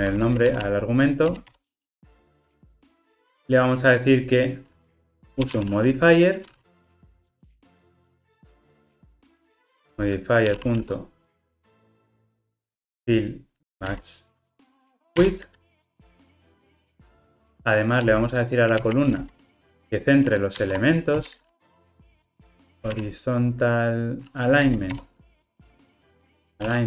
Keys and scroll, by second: 0.5 alt+Return, 7.7 Return, 15.3 Return, 25.0 Return.